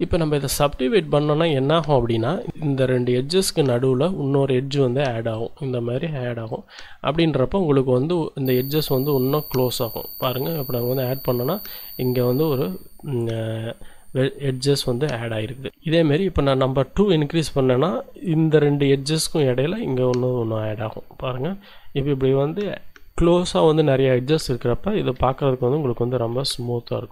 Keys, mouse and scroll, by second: 3.4 d, 3.6-5.0 drag, 3.9 d, 5.3 click, 6.5 click, 7.5 click, 10.8 click, 13.0 d, 13.3-16.5 drag, 13.5 d, 20.8 click, 25.2 z, 25.7 middle click, 26.6 shift+click.